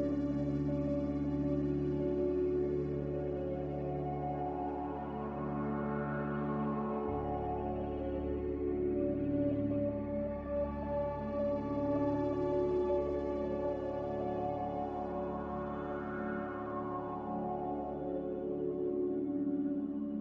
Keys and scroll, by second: 2.2 b, 3.3 z, 5.2 Delete, 15.6 a.